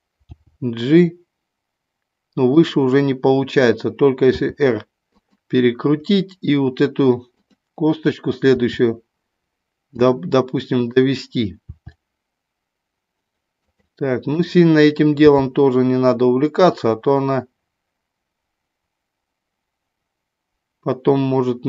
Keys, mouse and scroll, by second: 0.2 g, 2.6 click, 4.3 r, 5.2 click, 7.3 click, 8.6 r, 10.0 click, 10.8 click, 11.7 r, 13.5 click, 14.3 click, 15.2 g.